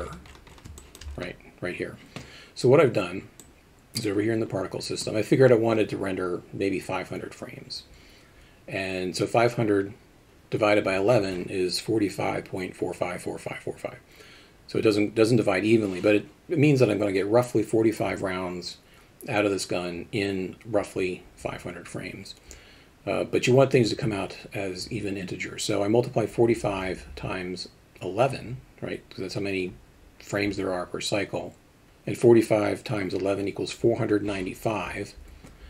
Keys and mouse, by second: 0.8 alt+shift+middle drag.